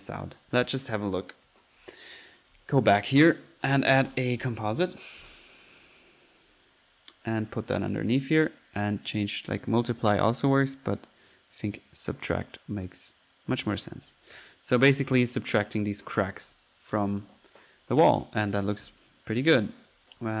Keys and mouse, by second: 0.5 ctrl+z, 2.5 drag, 3.4 right click, 3.8 click, 4.1 click, 4.2-5.3 typing, 5.7-6.1 drag, 6.2 click, 7.2 click, 8.4-8.8 drag, 9.8 click, 10.4 drag, 11.8 click, 13.8 click, 14.1 F1, 16.2 typing, 16.4 Escape, 17.3 F1, 19.4 Escape, 19.9 Escape, 20.0-20.3 drag, 20.1-20.4 typing.